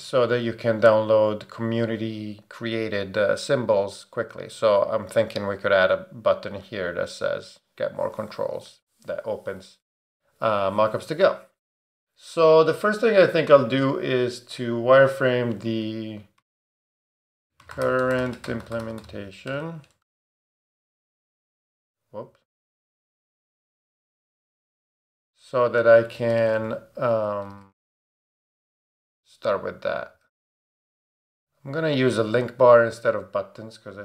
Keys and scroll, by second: 16.2-21.7 typing, 17.3 super+BackSpace, 24.1 Right, 24.4 Left, 24.7 BackSpace, 25.0 Return, 26.1-28.0 typing, 29.0 Return, 29.7-31.0 typing, 31.2 Down, 32.2 Return.